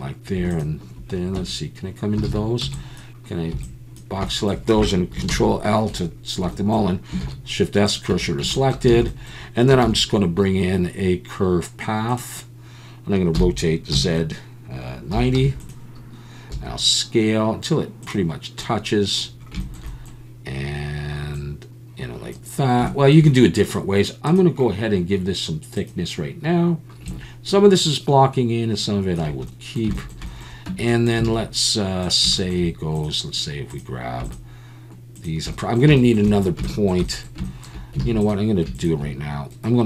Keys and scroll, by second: 1.4 Tab, 2.3 alt+a, 2.6 b, 3.5 b, 5.3 ctrl+l, 7.2 shift+s, 8.1 Tab, 8.9 alt+a, 9.8 shift+a, 9.9 shift+s, 13.3 r, 13.9 z, 15.1 9, 15.3 0, 16.5 s, 30.7 Tab, 31.3 alt+a, 38.0 alt+a.